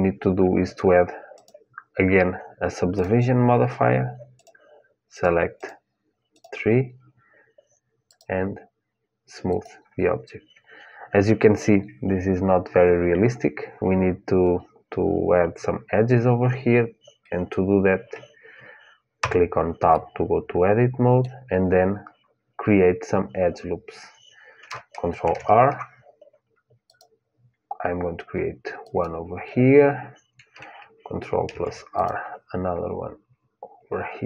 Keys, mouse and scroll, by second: 4.1-9.8 drag, 18.9 Tab, 19.6-21.7 middle drag, 25.0 ctrl+r, 31.2 ctrl+r.